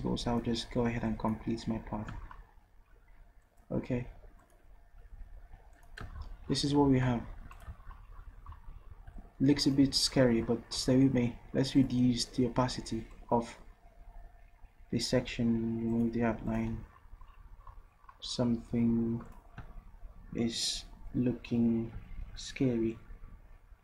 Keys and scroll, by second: 6.9 v.